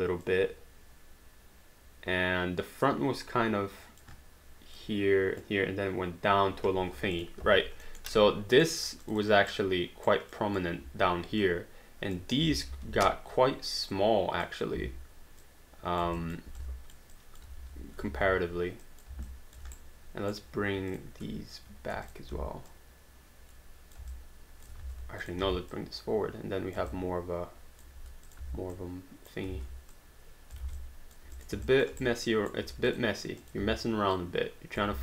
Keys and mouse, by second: 0.2 alt+click, 4.8 alt+click, 6.8 h, 7.2 click, 7.9 alt+middle click, 8.1 right click, 9.0 click, 9.5 right click, 10.3 click, 10.8 w, 11.4 click, 12.7 r, 13.9 click, 14.8 w, 15.4 click, 16.2 alt+click, 17.6 r, 18.2 ctrl+z, 18.8 click, 19.3 alt+click, 19.7 right click, 20.9 click, 22.0 shift+click, 22.3 w, 22.7 click, 24.1 alt+click, 24.8 ctrl+z, 25.2 click, 25.4 w, 25.7 click, 26.9 alt+click, 28.4 w, 28.8 click, 29.5 ctrl+z, 29.9 click, 30.6 alt+d, 30.8 alt+click, 31.6 alt+click, 32.0 right click, 32.6 q, 32.9 click, 33.6 w, 34.2 click, 34.9 alt+d.